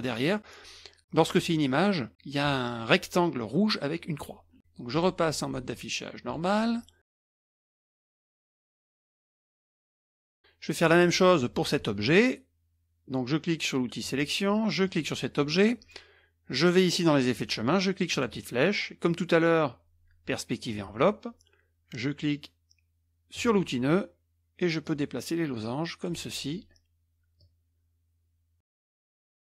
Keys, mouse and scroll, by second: 4.9 click, 6.3 click, 7.1 middle click, 7.1 scroll down 1, 7.3 click, 7.5 middle click, 7.5 scroll up 1, 7.7 click, 8.0 click, 8.1 middle click, 8.1 KP_Subtract, 8.4 click, 8.7 click, 8.9 click, 9.0 click, 9.3 Return, 9.9 click, 14.0 click, 14.8 click, 18.1-18.6 drag, 20.5 click, 23.3 click, 24.8-26.2 drag, 27.4-29.0 drag, 29.2 click.